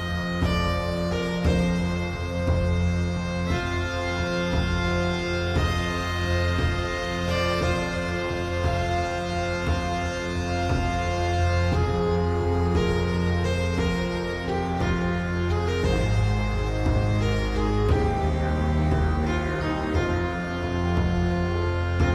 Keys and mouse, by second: 1.9-3.9 shift+drag, 4.6 middle click, 6.2-7.4 shift+drag, 8.1-11.5 middle drag, 15.0-17.4 shift+drag, 20.9-22.1 shift+drag.